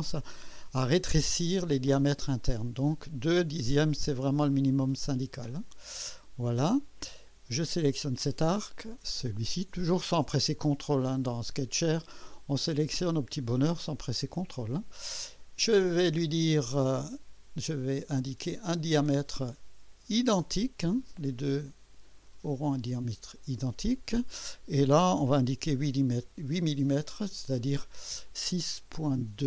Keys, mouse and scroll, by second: 2.8 scroll up 2, 4.5-5.8 drag, 6.1 scroll down 2, 7.5 click, 9.3 click, 18.7 click, 22.4 click, 25.5 8.